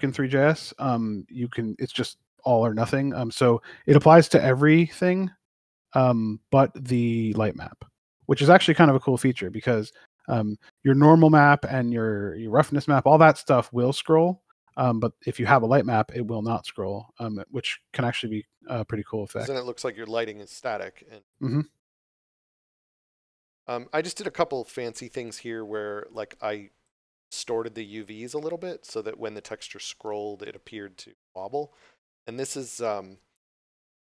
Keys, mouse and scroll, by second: 24.3 d, 24.8 w.